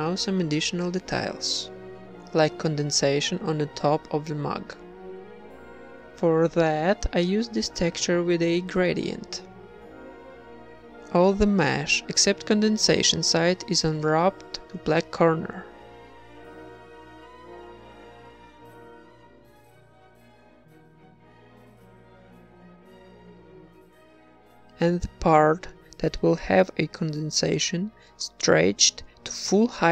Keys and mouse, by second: 0.0 Tab, 0.2 middle click, 0.4 u, 1.3 middle click, 1.5-4.0 typing, 4.0 ctrl+Tab, 4.0 ctrl+r, 5.5 ctrl+z, 6.1 a, 6.5 right click, 6.6 z, 6.8 g, 9.3 Tab, 9.7 Tab, 9.9-12.4 typing, 11.5 ctrl+r, 13.8 a, 14.2 g, 15.0 Tab, 15.4 ctrl+s, 15.8 Tab, 16.5 ctrl+Tab, 16.7 a, 18.4 ctrl+Tab, 19.0-23.0 typing, 19.3 middle click, 21.5 Tab, 26.1 click, 26.8 middle click, 27.7 Tab, 28.1 s, 28.9 s.